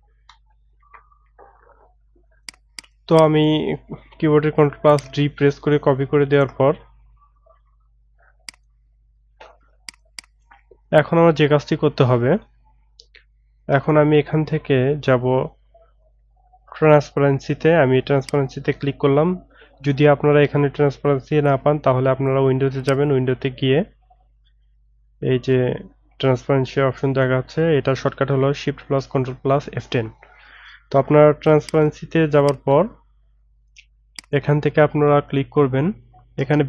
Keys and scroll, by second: 0.8 ctrl+z.